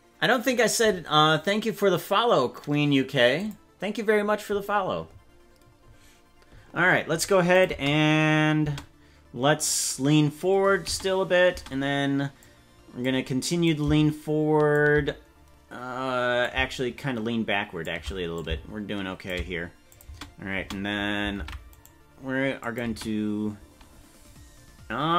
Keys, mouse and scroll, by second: 7.5 click, 7.6 space, 8.6 space, 10.8 space, 11.6 space, 12.4 click, 13.6-14.7 shift+drag, 16.4-17.8 shift+drag, 18.3 click, 19.9 click, 20.0 space, 20.6 space, 21.4 ctrl+Tab, 21.8 right click, 22.6 click, 22.8 space, 23.6 space.